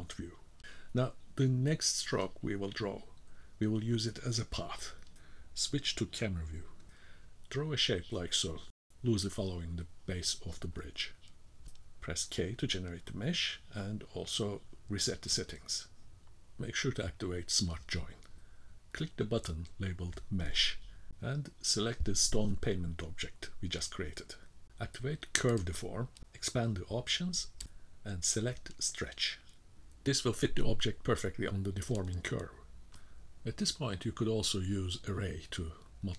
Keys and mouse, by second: 0.9-3.5 middle drag, 4.6 KP_0, 7.1-12.9 drag, 14.1 k, 18.5-21.8 drag, 24.0-30.2 drag, 30.2-33.0 middle drag, 35.7-36.1 drag.